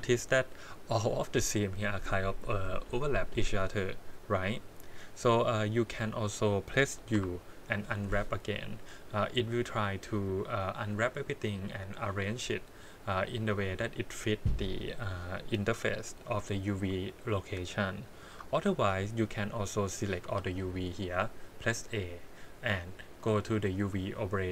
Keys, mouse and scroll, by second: 4.4 click, 7.1 u, 18.1 ctrl+z, 20.2 a, 23.2 middle click.